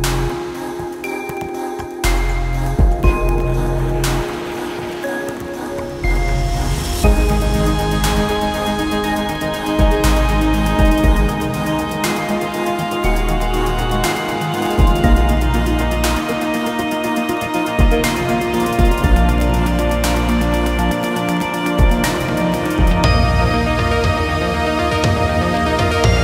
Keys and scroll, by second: 7.7 space, 10.6 Escape.